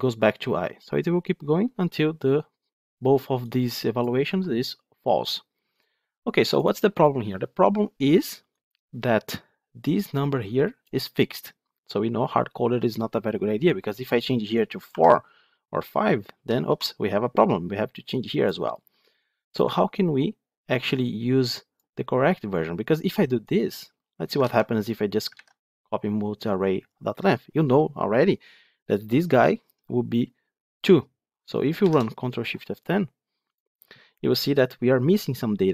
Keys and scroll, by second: 4.2 F9, 24.3 ctrl+c, 25.2 ctrl+v, 31.7 ctrl+shift+F10.